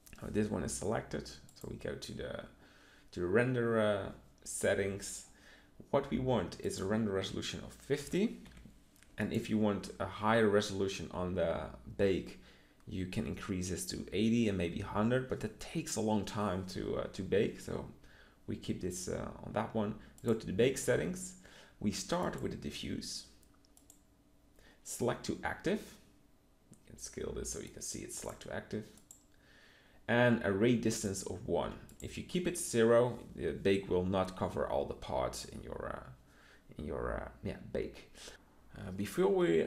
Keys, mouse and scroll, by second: 27.7 middle click.